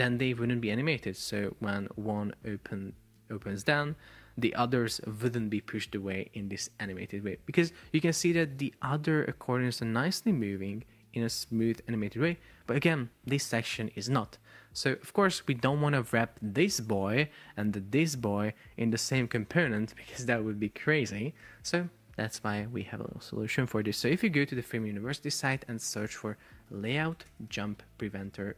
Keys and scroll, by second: 16.3 shift+super+4, 17.5 space, 20.2 Escape, 21.5 Escape, 24.5 alt+f, 24.7 super+o, 27.4 space, 28.2 BackSpace.